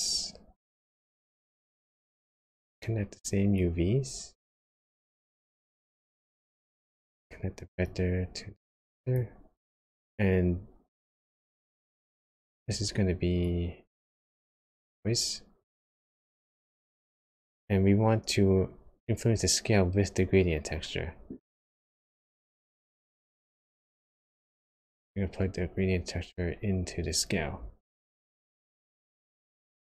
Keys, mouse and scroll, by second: 3.5 click, 6.1 middle click, 7.8 click, 11.2 click, 12.6 ctrl+shift+click, 13.4 click, 15.8-16.6 scroll up 6, 21.5 click, 22.8 click.